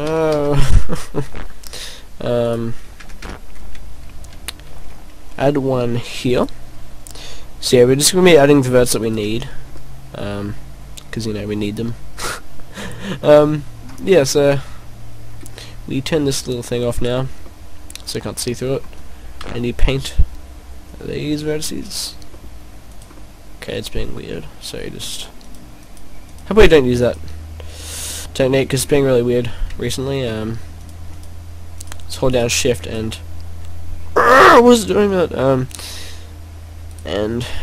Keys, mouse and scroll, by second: 2.5 right click, 2.9 ctrl+z, 3.2 ctrl+z, 4.6 ctrl+r, 9.1 click, 9.7 middle click, 11.1 middle click, 14.2 right click, 14.5 middle click, 16.3 middle click, 17.0 click, 17.5 middle click, 18.8 middle click, 19.4 c, 23.0 right click, 23.2 middle click, 25.5 shift+right click, 25.8 shift+right click, 26.3 shift+right click, 27.0 shift+right click, 27.7 shift+right click, 28.1 middle click, 29.0 middle click, 30.8 shift+right click, 31.1 shift+right click, 31.8 shift+right click, 32.3 shift+right click, 32.8 shift+right click, 34.5 shift+right click, 35.6 shift+right click, 36.9 shift+right click.